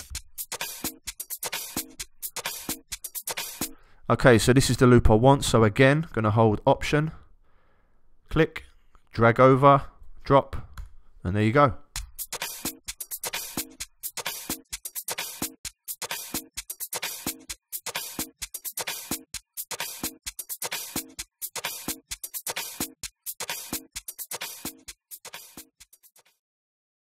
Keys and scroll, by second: 10.7 alt+Return, 11.9 space.